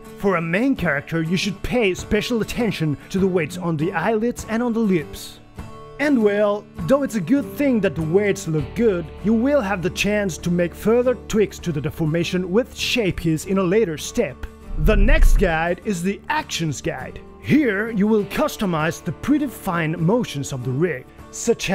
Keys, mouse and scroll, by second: 8.2-9.7 typing, 12.8 g, 13.6 g, 14.8 ctrl+s, 17.7 g, 18.0 g, 18.6 g, 18.9 g, 21.6-21.7 typing.